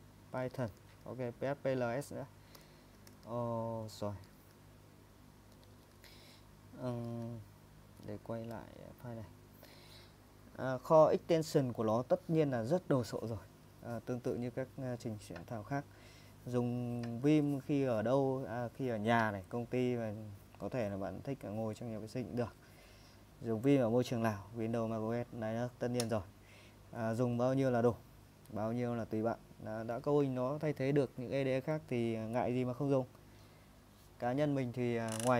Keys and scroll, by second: 0.0-3.1 typing, 3.1 super+Tab, 4.3 super+Tab, 4.5 super+Tab.